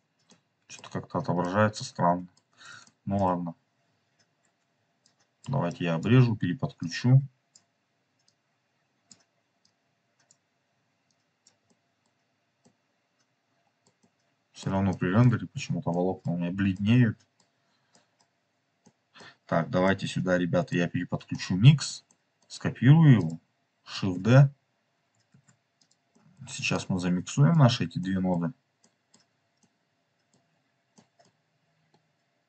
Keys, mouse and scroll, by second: 0.2-0.8 middle drag, 1.5 middle click, 2.8 shift+middle click, 3.8-4.3 scroll up 3, 4.9-5.4 ctrl+drag, 5.6 ctrl+right click, 6.7-7.6 drag, 8.2-9.1 drag, 9.5-10.3 drag, 10.9-11.4 drag, 11.6-12.0 middle drag, 12.5-13.9 middle drag, 14.0-14.5 middle drag, 14.8-15.2 shift+middle drag, 15.8 middle click, 16.6 middle click, 17.9 middle click, 18.9 middle click, 19.8 middle click, 21.3 middle click, 22.0 middle click, 23.1 click, 24.0 shift+s, 25.3 shift+d, 25.8 click, 26.1 middle click, 26.7 click, 27.4 middle click, 27.9 middle click, 28.7 middle click, 29.5 middle click, 30.9-32.4 middle drag.